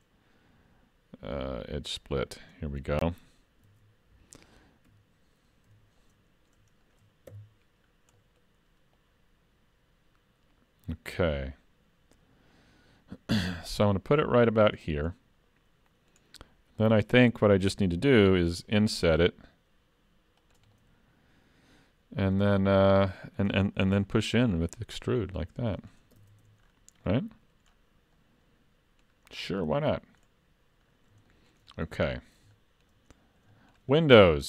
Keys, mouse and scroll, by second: 3.7 alt+a, 4.9 3, 5.7 l, 6.0 middle click, 6.9 shift+middle click, 7.3 KP_Decimal, 7.9 scroll down 2, 8.2 middle click, 9.0 click, 15.2 middle click, 16.5 scroll up 1, 16.8 middle click, 17.4 middle click, 18.5 i, 20.8 middle click, 24.0 e, 26.2 alt+a, 26.4 Tab, 26.7-27.0 scroll down 4, 27.1 middle click, 27.7-28.0 scroll down 2, 28.2 middle click, 30.2-30.6 scroll up 3, 30.9 scroll down 2, 31.3 shift+middle click, 32.1-32.5 scroll down 2, 32.5 shift+middle click, 33.1 scroll up 1, 33.5 shift+middle click, 33.9 scroll up 4, 34.2 shift+middle click.